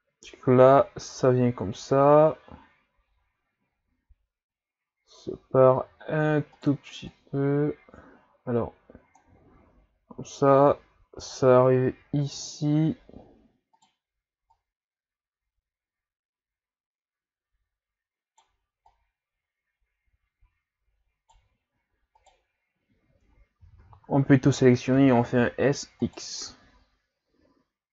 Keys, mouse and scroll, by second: 5.8 Tab, 6.5 right click, 7.1-10.1 drag, 13.8 right click, 14.5-15.9 right drag, 18.9 right click, 22.2 right click, 23.6 a, 23.8 a, 24.5 shift+scroll down 2, 25.0 s.